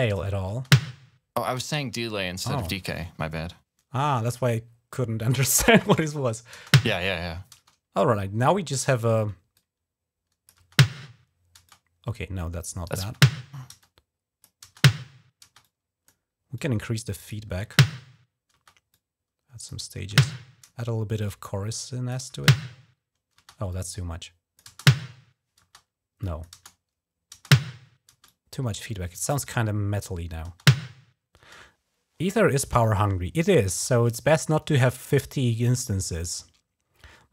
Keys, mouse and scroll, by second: 0.4 space, 1.3 space, 6.3 space, 7.3 space, 9.3 click, 10.3 space, 11.3 space, 11.4 click, 12.4 click, 12.8-13.5 typing, 13.6 click, 15.4 click, 16.3 click, 18.7 click, 21.0 click, 23.5 click, 24.5 click, 26.0 click, 26.2 typing, 28.0 click, 30.2 space, 31.1 space.